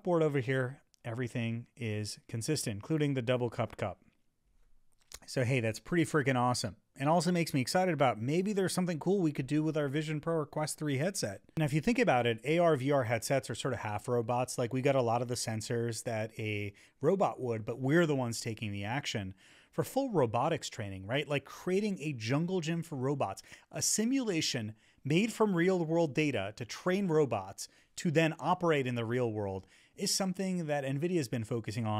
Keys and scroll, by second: 2.0 Right, 10.7 Up.